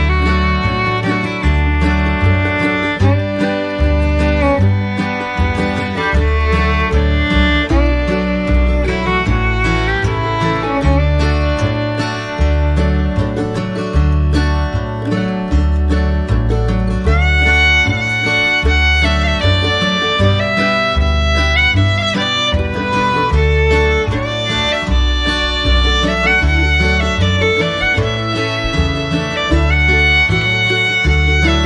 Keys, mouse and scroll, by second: 3.7 right click, 6.5 double click, 15.3 right click.